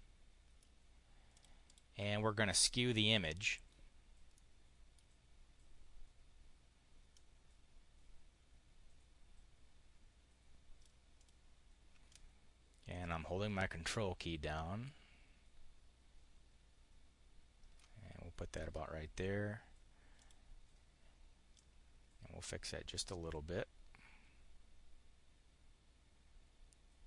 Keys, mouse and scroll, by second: 0.6 click, 1.0 click, 2.2 click, 4.2 click, 7.0-10.8 drag, 11.0 click, 11.9-17.8 ctrl+drag, 20.1 click, 21.4-27.0 drag.